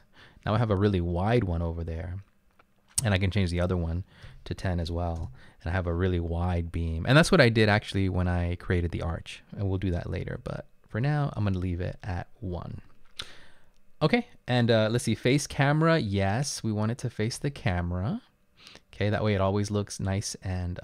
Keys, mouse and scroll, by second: 4.3-5.8 typing, 5.2 Return, 10.5 ctrl+z, 11.1 ctrl+z.